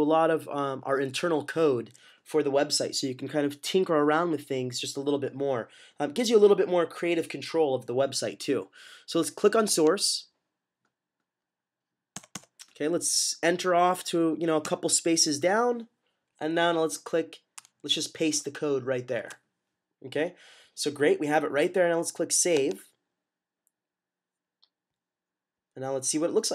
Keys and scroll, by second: 19.1 v.